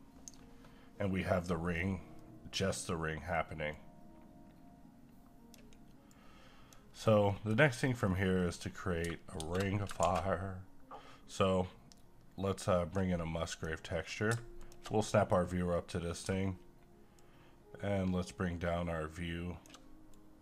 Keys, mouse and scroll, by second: 1.7 scroll down 1, 2.1 middle click, 2.6 scroll up 1, 3.7-6.9 drag, 6.9-7.3 scroll down 1, 7.3 middle click, 8.0-8.4 scroll down 1, 8.4 middle click, 9.6 space, 10.0 shift+a, 11.3-13.5 drag, 13.9 scroll up 1, 14.6 ctrl+click, 15.0 middle click, 15.4-16.3 scroll up 1, 17.2-20.4 shift+drag.